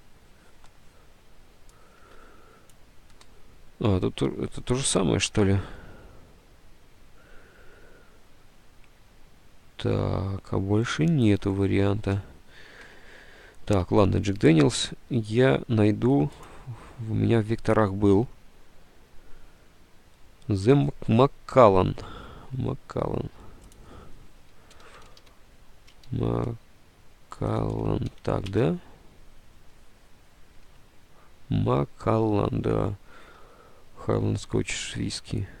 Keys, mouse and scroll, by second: 2.1 alt+Tab, 5.0 Delete, 5.0 alt+Tab, 5.5 alt+Tab, 12.7 alt+Tab, 13.9 alt+Tab, 14.5 Tab, 22.0 alt+Tab, 24.6-26.0 typing, 26.0 alt+Tab, 27.1-29.0 typing, 30.7 alt+Tab, 30.8 a, 33.6 alt+Tab.